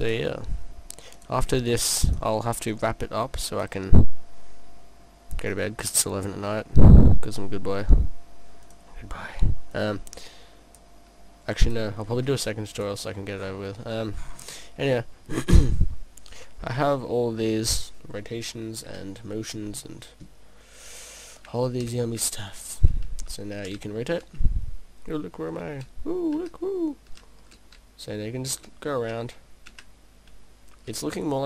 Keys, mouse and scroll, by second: 0.1 click, 2.1 click, 4.0 middle click, 6.6-8.7 scroll up 5, 8.7 click, 9.8 click, 12.7 click, 13.1-14.3 scroll down 3, 14.3-14.6 scroll down 6, 14.6 middle click, 21.9 p.